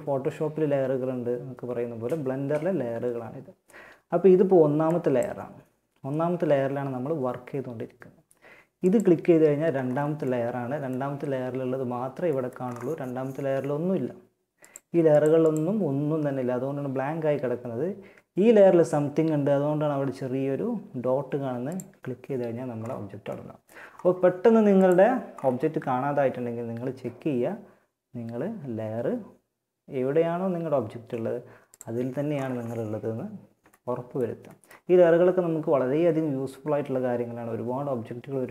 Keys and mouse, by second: 4.0-5.8 drag, 8.0-9.2 drag, 9.2 middle click, 13.8-22.8 middle drag, 24.1-32.9 drag.